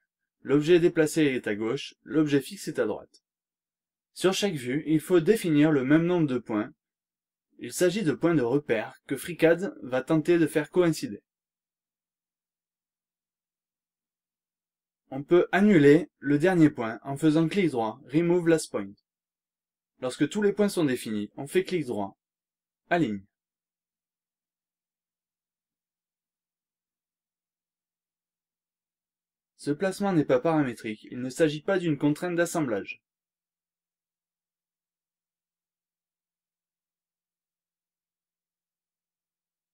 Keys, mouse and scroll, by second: 1.5 click, 4.0 click, 7.9 click, 9.7 click, 11.9 click, 14.4 click, 16.1 right click, 18.0 click, 20.1 click, 21.0 right click, 21.7 click, 23.2 click, 24.1 right click, 25.9 click, 27.4-30.5 shift+right drag, 30.5 shift+scroll down 1, 30.7-31.0 shift+scroll up 2, 31.2-33.2 shift+right drag, 36.2-37.7 drag, 38.7 click.